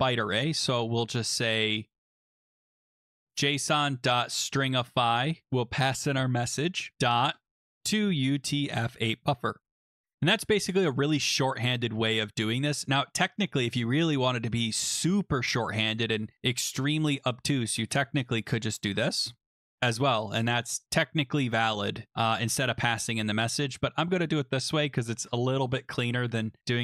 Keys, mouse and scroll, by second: 0.2-0.9 typing, 1.9-2.8 typing, 3.2 Tab, 3.9-9.4 typing, 9.6 ctrl+s, 17.4 click, 18.0 ctrl+c, 18.7 click, 18.8 click, 18.9 ctrl+v, 19.7 scroll down 4, 22.3 ctrl+z, 23.3 click, 25.0 ctrl+s.